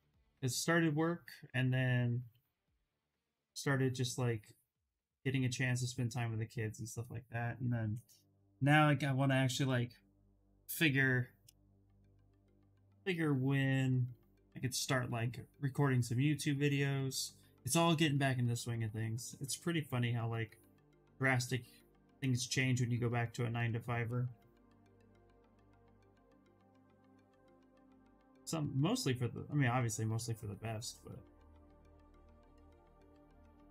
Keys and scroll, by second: 23.9 ctrl+z, 24.0-25.2 typing.